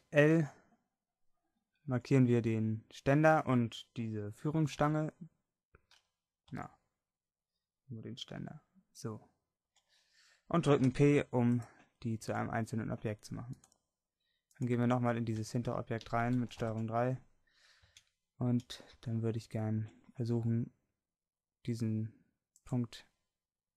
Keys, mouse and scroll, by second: 0.4 l, 1.9 a, 5.1 l, 6.5 a, 8.3 l, 9.7 l, 10.9 p, 12.3 Tab, 15.5 Tab, 16.6 ctrl+KP_3, 18.0 a, 18.5 a, 19.9 c.